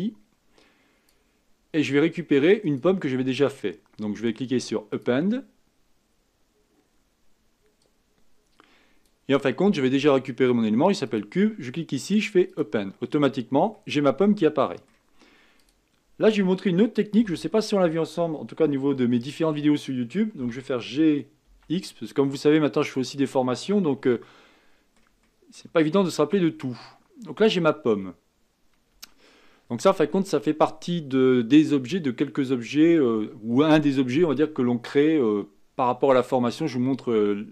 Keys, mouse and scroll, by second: 13.2-13.7 scroll down 4, 13.7-15.7 middle drag, 15.7 click, 17.2 KP_1, 20.4 g, 23.6-25.8 middle drag, 25.8-26.4 scroll up 3, 28.9 Tab, 30.1-31.6 middle drag, 31.6 scroll up 1.